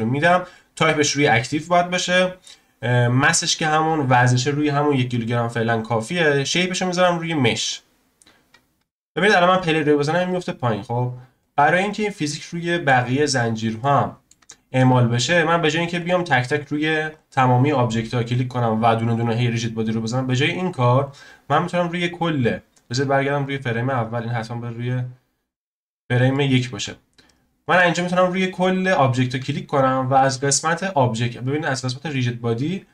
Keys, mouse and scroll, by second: 6.5-9.5 drag, 9.6-11.9 drag, 11.9-12.2 scroll down 1, 12.2-13.3 shift+middle drag, 13.3-13.8 scroll down 1, 13.8-15.9 shift+middle drag, 15.9 click, 16.4 click, 17.1 click, 19.9-20.3 scroll up 1, 20.3-21.0 scroll down 1, 21.0 click, 21.2-21.9 scroll down 1, 21.9 shift+click, 23.2 right click, 23.4 click, 24.3-25.0 drag, 25.0-25.5 scroll up 1, 26.0-26.3 scroll up 1, 26.3-27.6 shift+middle drag, 27.6 click, 28.1 shift+click, 30.3-32.9 drag.